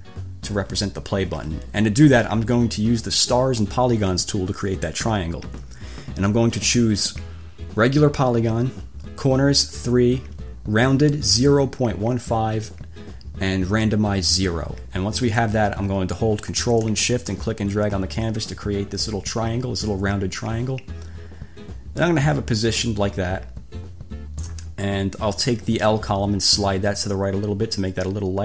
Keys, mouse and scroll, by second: 4.9 click, 17.5-24.9 ctrl+shift+drag, 26.7-28.4 drag.